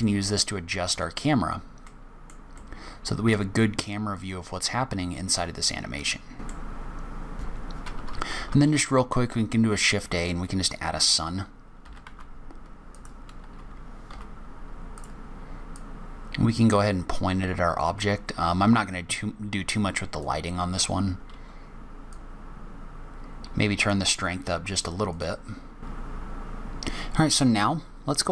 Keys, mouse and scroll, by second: 0.0 shift+middle click, 1.1 scroll down 2, 1.8 middle click, 2.5 shift+middle click, 4.1 click, 6.4 middle click, 6.6 shift+middle click, 6.7 middle click, 6.9 scroll up 1, 7.0 scroll down 1, 7.0 shift+middle click, 7.1 middle click, 7.3 click, 7.4 Delete, 7.4 click, 8.5 shift+a, 11.8 g, 13.5 g, 15.7 click, 22.1 click, 26.5 click.